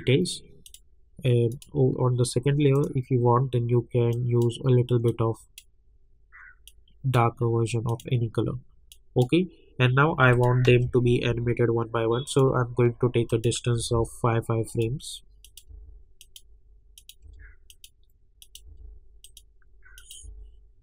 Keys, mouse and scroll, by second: 0.6-10.3 drag, 10.9 =, 11.3 =, 12.2 click, 13.8 [, 14.7 click, 15.6 [, 16.2 click, 17.2 [, 17.7 click, 18.6 [, 19.2 click, 20.2 [.